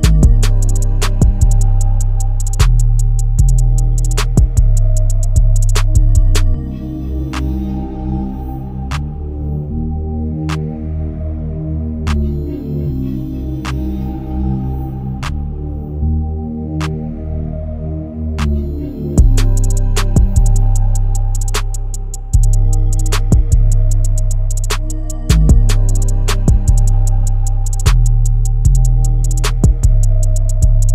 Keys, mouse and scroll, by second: 5.5-6.1 scroll up 1, 6.1-12.7 drag, 12.7-13.0 scroll down 1, 13.0-13.5 scroll up 1, 13.6 click, 14.1 scroll down 1, 14.3-14.7 scroll up 1, 14.7-18.9 drag, 18.9-22.4 drag, 22.4 scroll down 1, 22.7-23.2 scroll up 1, 23.2 scroll down 1, 23.4-23.9 scroll up 1, 23.9-26.2 drag, 26.2 scroll down 1, 26.4-27.2 scroll up 1, 27.2 click, 27.4 scroll down 1, 27.6-28.6 scroll up 1, 28.8 click, 29.4-30.3 scroll up 1.